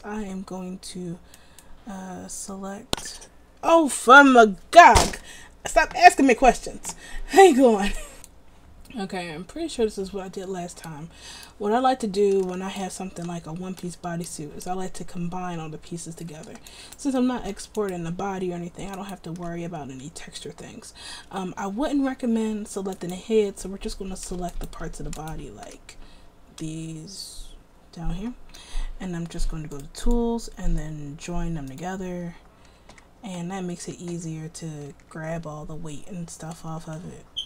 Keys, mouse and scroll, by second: 33.4 Tab, 34.1 Tab, 35.2 a.